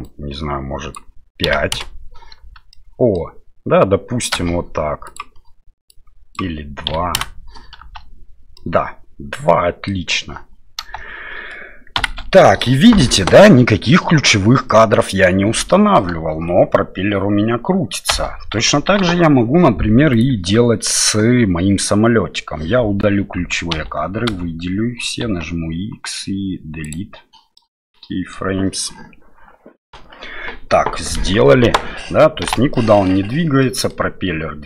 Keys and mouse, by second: 2.4 space, 2.7 middle click, 5.2-7.5 drag, 7.8 space, 8.6-9.9 middle drag, 12.0 shift+Left, 14.7 middle click, 15.7 middle click, 16.1 space, 18.9 shift+Left, 20.1 right click, 23.7 a, 24.3 a, 25.2 x, 27.5 middle click, 32.4 space, 32.7 middle click, 33.6 middle click.